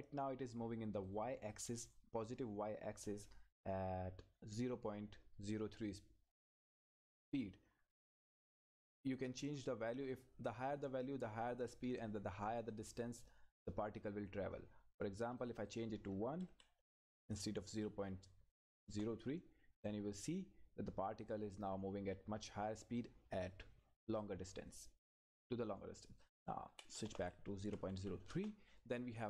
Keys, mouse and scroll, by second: 8.3 click, 12.7 click, 15.4 click, 16.5 Right, 18.8 Return, 19.9-24.2 drag, 26.7 Right, 28.3 Return.